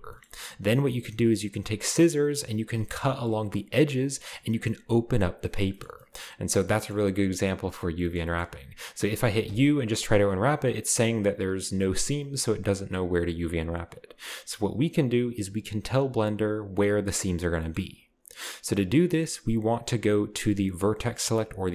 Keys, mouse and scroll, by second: 3.2 middle click, 4.0-5.2 scroll down 2, 5.8 shift+middle click, 5.8-6.7 shift+scroll up 2, 8.2-9.4 shift+scroll up 2, 9.4 u, 10.0-11.0 drag, 17.6-21.7 middle drag, 17.7-18.3 scroll up 1, 18.3-21.7 scroll up 1.